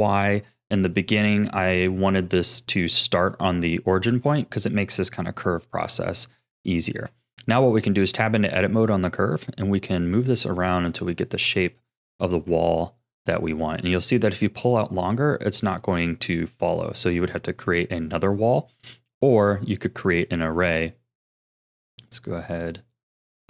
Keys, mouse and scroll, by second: 7.0 Tab, 8.8 click, 9.4 r, 10.9 click, 11.8 shift+middle click, 12.5 g, 20.1-23.4 drag.